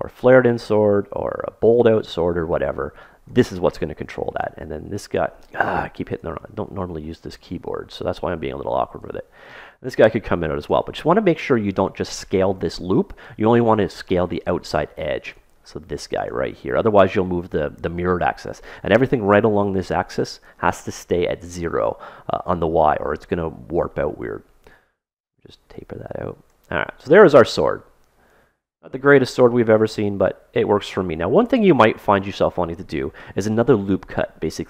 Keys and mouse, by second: 7.0-8.8 super+middle drag, 9.0-10.7 drag, 14.3-18.1 right drag, 23.8-25.8 middle drag, 25.3-27.3 drag, 27.5-29.4 middle drag, 31.1-33.4 middle drag, 33.6-34.6 middle drag.